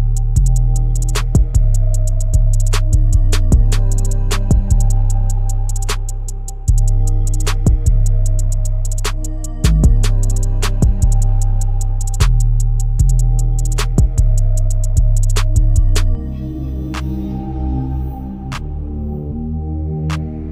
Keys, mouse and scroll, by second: 0.0-1.1 drag, 1.1 middle click, 1.8-2.5 scroll up 9, 2.5 shift+middle click, 3.3-3.7 scroll down 1, 3.7-8.0 shift+middle drag, 8.0-8.6 scroll down 1, 8.6 KP_0, 10.3-11.4 drag, 11.4 scroll up 1, 15.3-20.5 shift+drag.